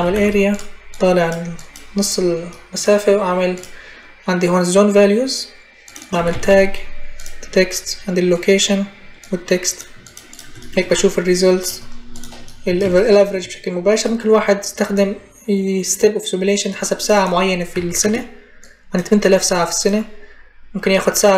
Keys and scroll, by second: 0.0-0.4 typing, 5.7-6.8 typing, 17.6 5, 17.8 Return.